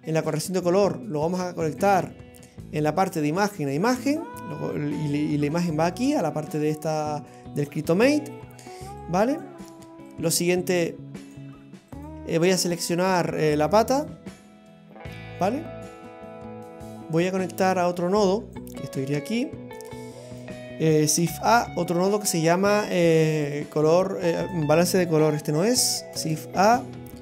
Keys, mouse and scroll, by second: 4.0-6.2 scroll down 1, 6.2-6.8 scroll down 6, 6.8 middle click, 9.0 click, 10.1 click, 12.0 click, 12.5 click, 16.8 click, 17.8 click, 19.5 click, 21.2 shift+a, 25.4 Delete, 26.2 shift+a.